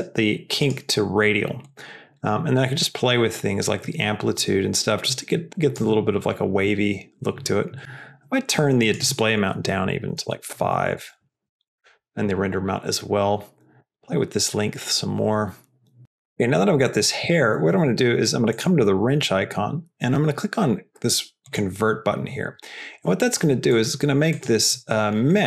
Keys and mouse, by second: 0.6-1.7 drag, 2.9-5.7 drag, 8.9-12.3 drag, 13.7-16.0 drag, 16.3 middle click, 16.9 middle click, 18.4 click, 24.2 click.